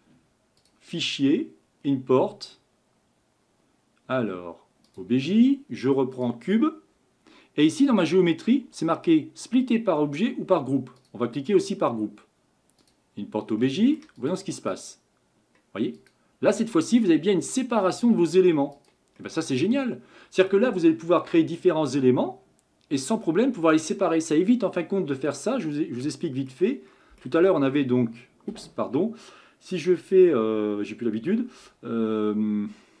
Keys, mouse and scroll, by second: 0.6-3.6 drag, 13.6-14.2 middle drag, 14.2 click, 14.7 click, 15.9 click, 16.5-17.1 middle drag, 17.1-17.5 scroll up 1, 17.5 click, 18.7 click, 19.2-22.3 middle drag, 25.4-26.1 scroll down 4, 26.1-26.8 shift+middle drag, 26.8 scroll up 1, 26.9 middle click, 27.5 r.